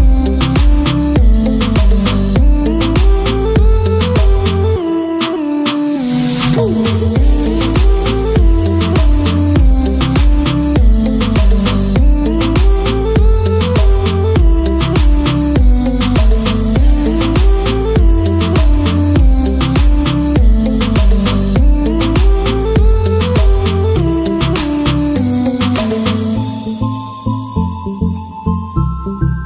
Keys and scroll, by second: 0.0-0.8 typing, 3.6 Return, 6.2 shift+,, 8.0 BackSpace, 9.6-18.8 typing, 20.6-29.4 typing.